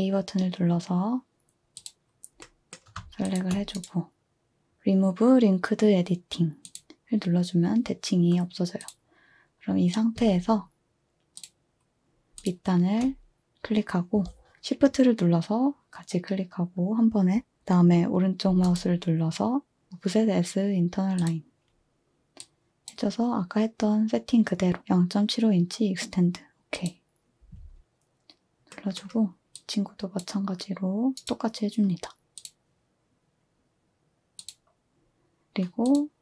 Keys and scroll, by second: 10.2 z.